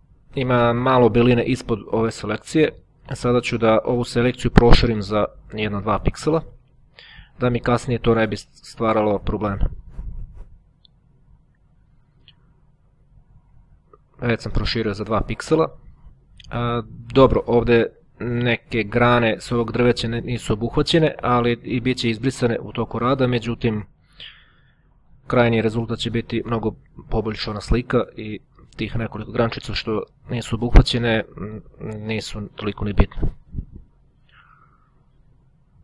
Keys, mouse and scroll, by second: 2.1-4.1 ctrl+scroll down 2, 6.8 click, 8.7 click, 10.5 click, 12.1 click, 12.9-14.0 drag, 15.2-15.7 ctrl+scroll up 1, 15.9-17.1 ctrl+scroll up 1, 22.6-23.6 drag, 24.1-25.1 drag, 25.3 click, 26.5 click, 27.3 middle click, 27.3 click, 28.9-31.0 ctrl+scroll down 2, 31.8 click, 32.7 scroll down 1, 32.8 click, 34.7-35.3 ctrl+scroll down 1.